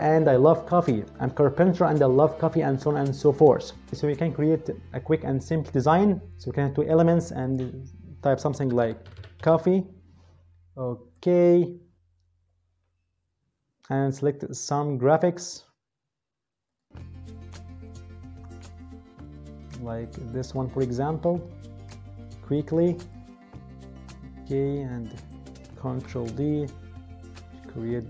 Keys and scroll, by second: 8.3-9.9 typing, 25.8 ctrl+d.